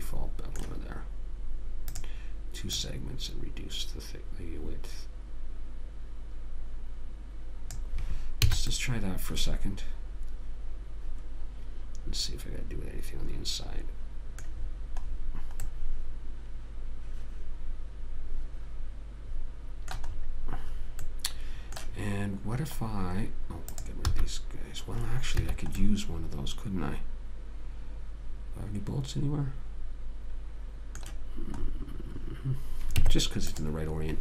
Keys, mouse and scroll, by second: 0.3-2.3 middle drag, 2.3 click, 8.9 a, 9.0-10.6 middle drag, 15.9 middle click, 21.3-24.0 middle drag, 24.0-25.6 right drag, 24.4 x, 25.6 click, 26.6-27.7 middle drag, 31.9-33.3 middle drag, 33.3 Tab.